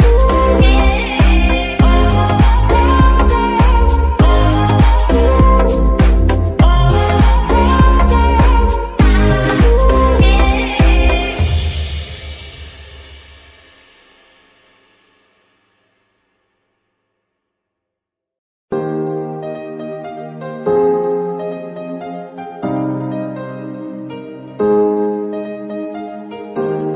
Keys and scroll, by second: 4.1 r, 7.5 Escape, 8.6 r, 10.4 Escape, 14.0 g, 15.5 Escape, 19.0 g, 19.1 y, 20.4 Escape, 21.0 shift+Escape.